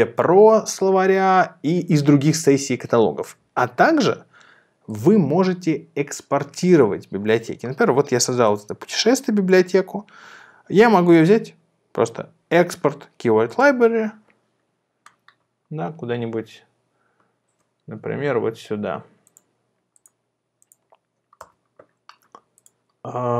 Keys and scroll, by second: 21.5 Return.